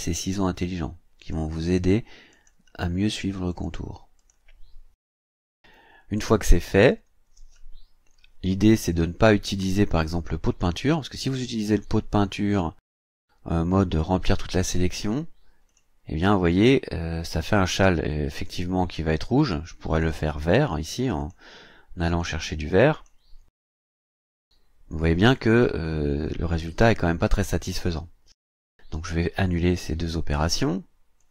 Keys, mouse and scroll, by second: 1.2 click, 2.3 click, 3.5 click, 4.2 click, 11.2 click, 15.7 click, 19.9 click, 21.2 click, 22.1 click, 22.9 click, 24.4 click, 31.2 click.